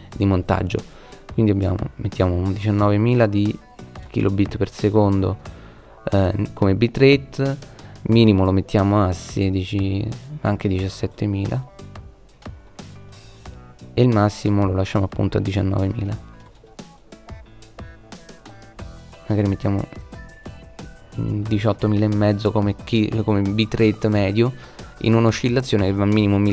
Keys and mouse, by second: 2.5 KP_0, 2.7 KP_0, 7.8-9.9 middle drag, 11.1 KP_0, 11.8-13.1 middle drag, 14.5 KP_0, 18.6 click.